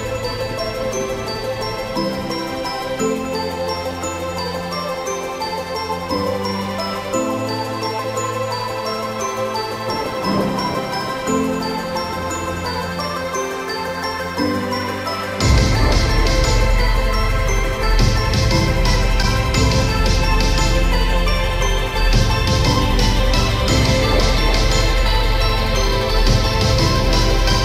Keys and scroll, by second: 19.5 Return, 23.8 ctrl+t, 26.6 Return.